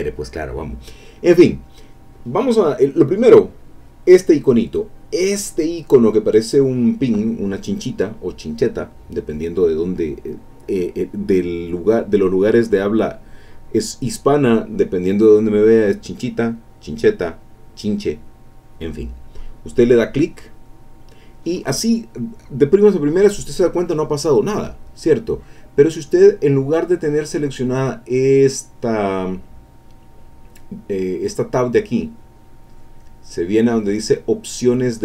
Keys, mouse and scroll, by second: 1.8-2.5 scroll up 1, 2.5-3.6 scroll up 1, 20.5 click, 27.4-28.4 drag, 34.4-35.0 drag.